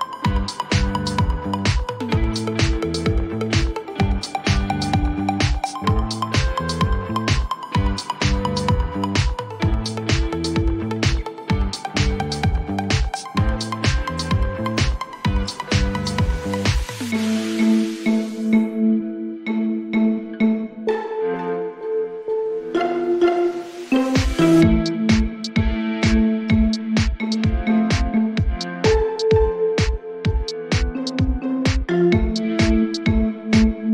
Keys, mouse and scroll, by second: 0.0-2.1 typing, 4.2 click, 6.1 click, 7.0 ctrl+d, 8.6 p, 10.4 click, 11.4-12.5 typing, 12.7 Return, 15.7 click, 17.9 click, 20.8 click, 22.6 click, 25.1 click, 26.2 ctrl+d, 28.1 p, 30.0 click, 30.6-31.0 typing, 32.4-33.3 Return, 33.0-33.9 typing.